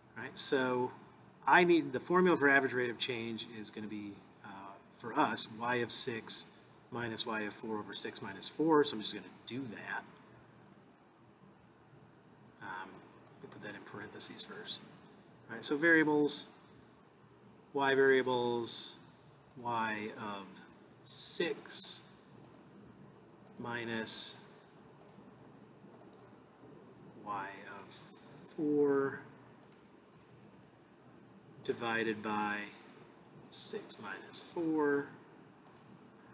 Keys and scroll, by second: 10.7 Right, 14.7 (, 16.9 Right, 18.2 Return, 19.5 Return, 21.2 (, 21.9 6, 22.5 ), 23.5 -, 25.0 Right, 25.9 Return, 26.5 Return, 27.7 (, 28.4 4, 30.1 ), 31.6 (, 31.6 /, 32.8 (, 33.6 6, 33.9 -, 34.5 4, 35.7 ).